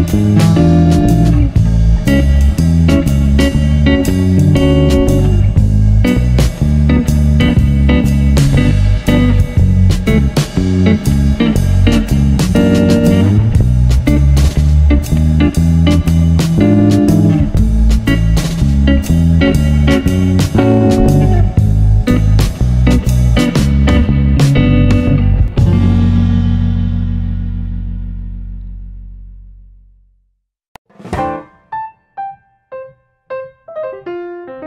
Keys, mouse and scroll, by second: 4.5-6.5 drag, 9.2 click, 11.7-13.8 drag, 16.5 click, 16.9 click, 17.4 click, 18.0 shift+click, 18.5 shift+click, 18.8 shift+click, 19.7 ctrl+l, 21.1 click, 22.3-22.7 scroll down 1, 23.1 click, 25.0-27.0 drag, 27.8 click, 28.4-29.8 shift+middle drag, 29.8-30.2 scroll down 7, 30.2-30.6 shift+middle drag, 30.6 scroll up 7, 31.0 shift+middle click, 31.3-31.8 scroll up 3, 31.8-32.3 shift+middle drag, 32.3-34.4 drag.